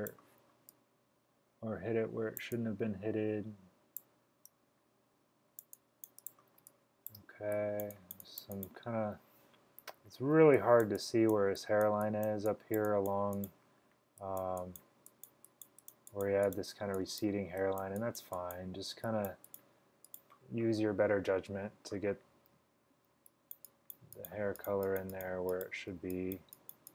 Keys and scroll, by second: 6.7 space, 7.2 space, 9.9-10.3 typing, 23.2 x, 26.0 x.